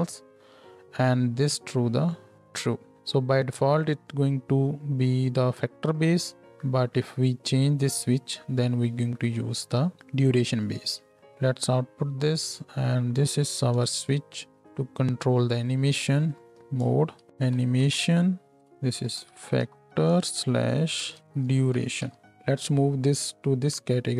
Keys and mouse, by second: 13.7 n, 15.8 click, 16.1 middle click, 16.3 click, 16.4-24.1 middle drag.